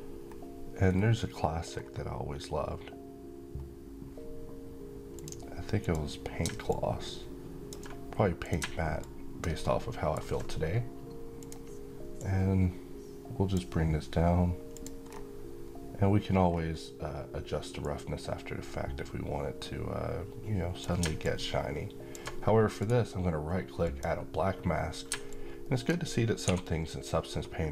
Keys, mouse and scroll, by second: 0.0-0.6 scroll down 1, 2.1-3.2 scroll up 1, 4.8-9.3 drag, 9.3-11.1 alt+middle drag, 11.1-13.5 drag, 14.8-15.5 scroll down 1, 17.6-20.6 drag, 22.5 right click, 23.5 click, 26.1 3.